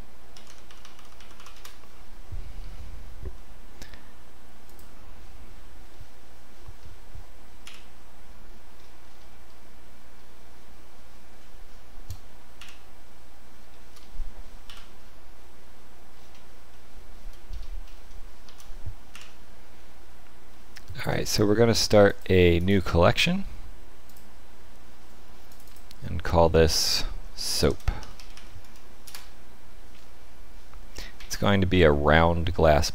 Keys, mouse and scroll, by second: 0.7 p, 3.3 middle click, 4.6 click, 5.8 middle click, 7.6 KP_1, 8.7-10.1 scroll down 6, 10.1-10.6 scroll up 1, 12.5 KP_1, 13.6 shift+middle click, 14.6 KP_5, 16.1-16.6 scroll down 4, 16.6 shift+middle click, 17.4-18.0 scroll up 7, 18.4 shift+s, 20.4 shift+middle click, 22.0 click, 22.5 right click, 25.4 click, 25.6 click, 31.1 shift+a.